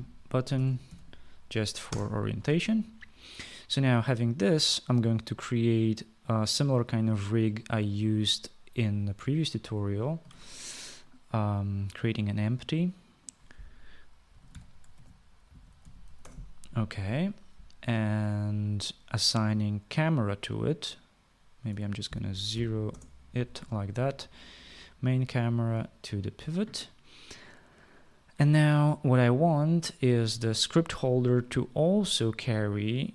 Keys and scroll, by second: 0.0-1.6 typing, 2.1 Return, 10.5 ctrl+s, 14.3-16.7 typing, 22.7 0, 23.1 Return.